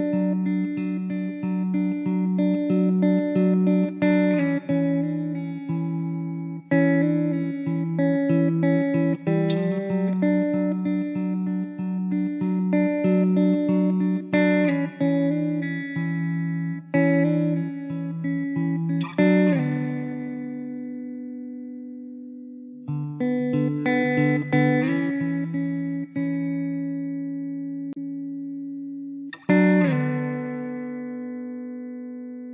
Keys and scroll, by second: 1.7 Tab, 3.8 shift+a, 4.7 Tab, 5.1 shift+a, 6.6 s, 8.8 s, 16.8 s, 21.8 Tab, 23.3 alt+z, 25.1 g, 27.0 alt+z, 28.6 alt+z.